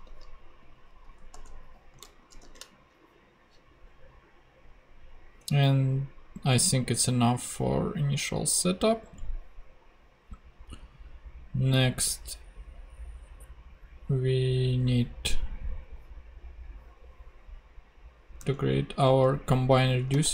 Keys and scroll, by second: 1.3 ;, 1.9 super+;, 2.4 shift+super+p, 18.4 super+Tab, 20.1 super+f.